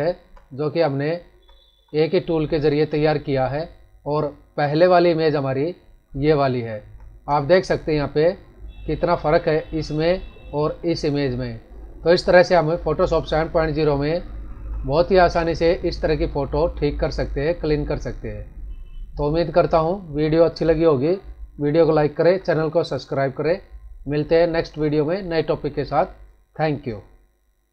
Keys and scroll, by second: 1.3 ctrl+=, 2.5 ctrl+-, 6.7 ctrl+=, 14.5 ctrl+-, 21.8 ctrl+=.